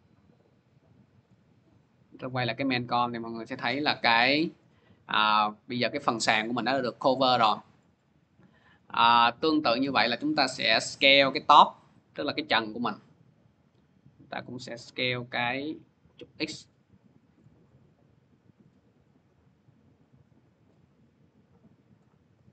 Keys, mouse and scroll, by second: 1.1 click, 2.1 click, 8.5 click, 9.7 middle click, 11.2 click, 13.4 s, 14.8 click, 17.2 click, 21.7 click.